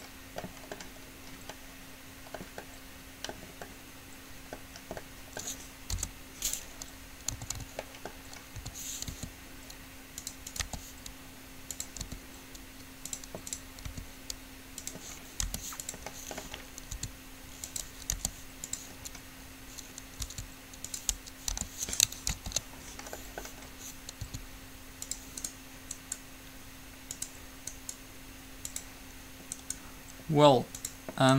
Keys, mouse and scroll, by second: 0.6-2.5 middle drag, 4.2 middle click, 4.6 middle click, 6.1 u, 7.6 a, 7.8 a, 8.8 a, 9.2 r, 10.8 g, 12.3 r, 14.1 r, 15.6 g, 17.1 s, 18.3 g, 20.4 s, 21.8 g, 22.5 ctrl+z, 24.4 s, 29.8 right click.